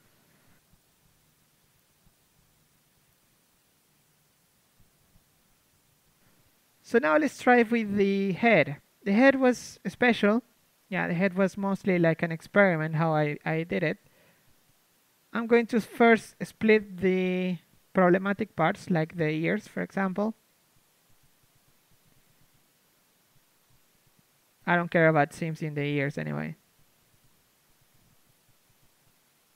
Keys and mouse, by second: 0.0-0.2 typing, 0.2-1.6 drag, 2.6 click, 2.6 r, 4.0-6.4 drag, 4.0 g, 6.4 a, 6.8 shift+space, 7.0 Tab, 7.5 a, 9.1 KP_3, 9.8 Tab, 10.2 a, 10.9 l, 11.3 ctrl+Tab, 12.7 a, 14.4 shift+right click, 18.0 z, 18.3 z, 18.9 a, 19.2-20.8 drag, 19.5 z, 20.5 z, 21.9 click, 22.1 click, 22.2-26.8 middle drag, 26.3 click, 26.5-29.3 typing, 27.5 middle click.